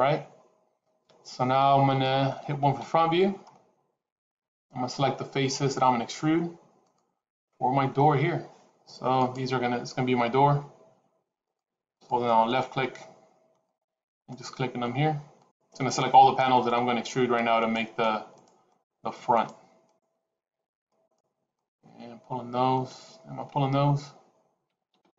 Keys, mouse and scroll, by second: 2.7 KP_1, 3.3-4.2 scroll up 3, 4.2-5.7 scroll up 1, 6.8 click, 9.0 click, 11.4 shift+click, 11.8 shift+click, 12.4 shift+click, 13.5 shift+click, 14.1 shift+click, 15.2 shift+click, 15.7 shift+click, 16.4 shift+click, 17.4 shift+click, 18.2 shift+click, 18.6 shift+click, 19.2 shift+click, 19.7 shift+click, 21.0 shift+click, 21.4 shift+click.